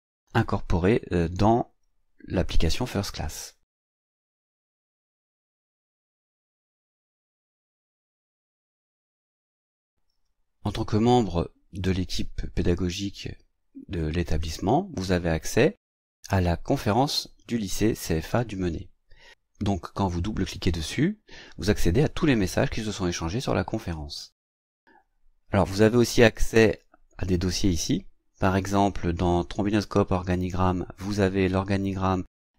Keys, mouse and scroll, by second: 4.6 click, 9.2 click, 20.3 click, 29.6 click.